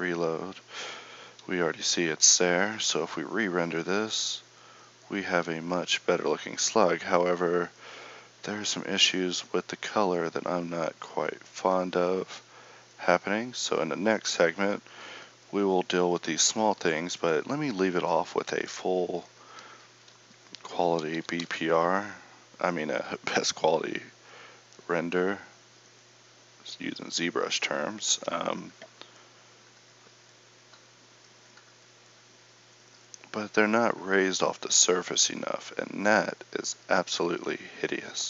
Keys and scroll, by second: 20.1 Escape, 21.2 r.